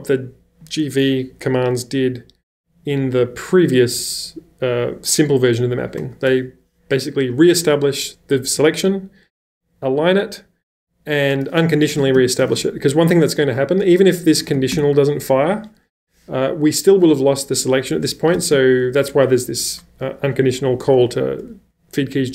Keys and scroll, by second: 11.7-13.0 typing, 14.2-14.7 typing, 18.3 typing.